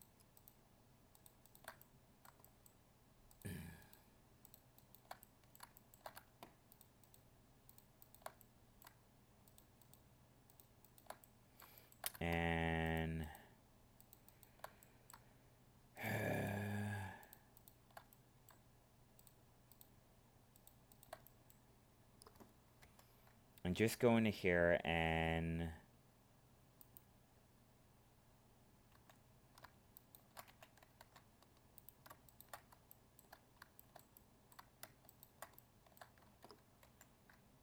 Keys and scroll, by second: 22.8 ctrl+f, 31.0 ctrl+Tab, 36.8 ctrl+e.